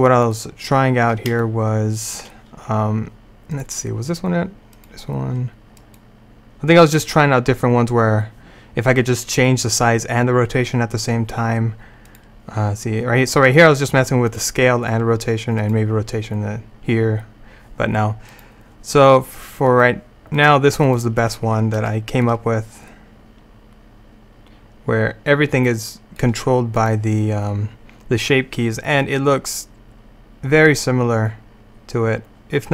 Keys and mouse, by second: 0.3-3.6 drag, 3.6-8.4 right drag, 12.1-18.3 right drag, 18.4-22.3 right drag, 22.3 middle click, 23.0-24.1 drag, 26.8-31.4 drag.